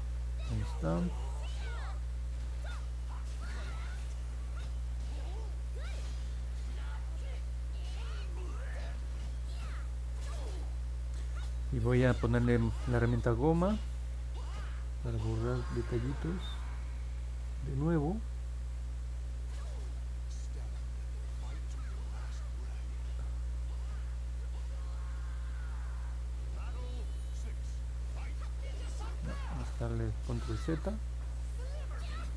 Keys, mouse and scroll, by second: 3.0-4.4 alt+drag, 5.8-10.0 drag, 20.1-23.0 drag, 24.4-28.5 drag, 29.4 ctrl+z, 31.1-32.1 drag.